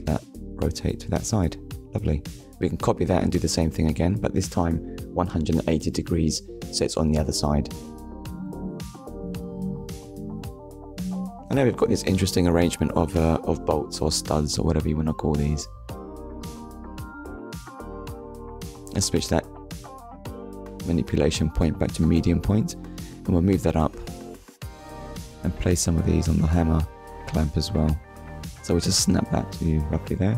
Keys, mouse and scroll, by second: 0.3 right click, 1.4 r, 3.3 Return, 4.2 click, 4.6 middle click, 5.7 scroll down 1, 6.3 shift+middle click, 7.1 middle click, 8.3 ctrl+s, 8.8 middle click, 10.6 KP_1, 12.0 click, 14.3 click, 16.1 click, 17.0 click, 19.3 alt+d, 20.0 right click, 21.0 click, 23.6 scroll up 1, 24.2-24.6 scroll up 2, 25.9 click, 26.4 ctrl+click, 28.0 scroll down 1, 29.4 KP_3.